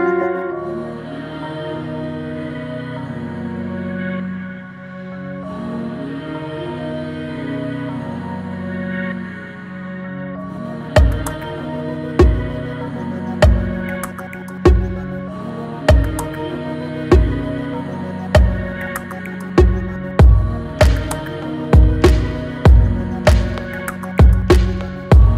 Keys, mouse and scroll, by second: 4.7-5.9 shift+middle drag, 5.9 e, 9.7 scroll down 2, 10.5 shift+middle click, 11.2 scroll down 1, 13.3 e, 19.2 middle click, 20.2-23.4 scroll down 2.